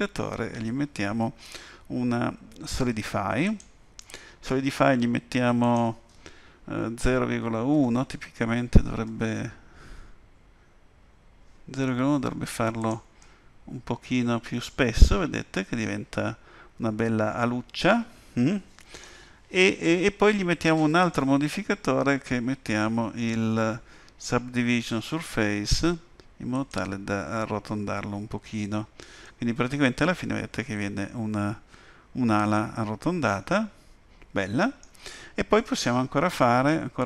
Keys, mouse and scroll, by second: 5.6 click, 13.2 middle click, 21.0 click, 28.5-28.8 scroll up 2, 29.2 middle click, 35.6 Tab, 36.6 middle click.